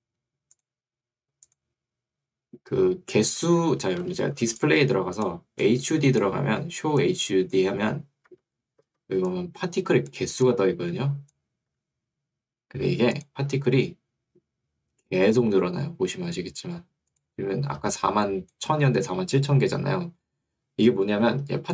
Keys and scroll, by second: 4.1 Escape, 8.3 Escape, 11.7 Escape, 19.5 Escape.